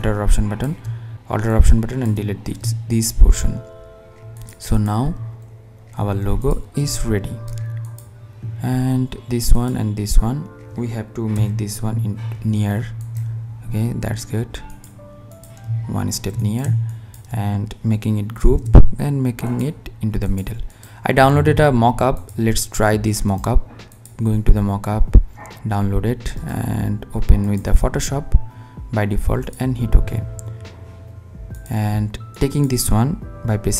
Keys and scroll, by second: 9.9 Left, 18.0 shift+g, 32.3 super+c.